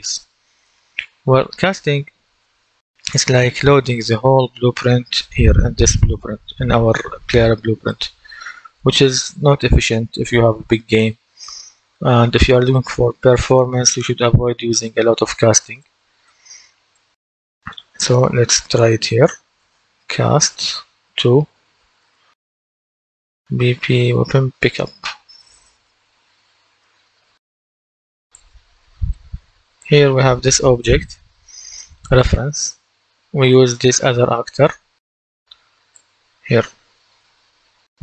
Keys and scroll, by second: 19.4-21.9 typing, 23.1-25.6 typing.